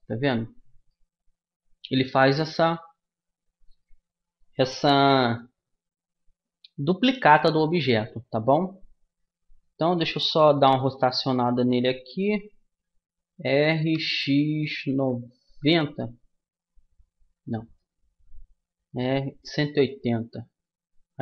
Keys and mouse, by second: 0.8-10.8 middle drag, 10.8 r.